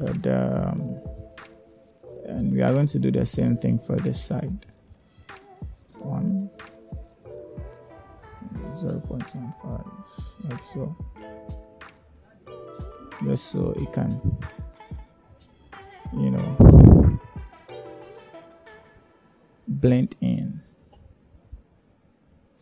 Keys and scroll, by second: 4.7 1, 4.9 Return, 7.8 0, 8.1 ., 8.3 1, 8.6 5, 8.8 Return.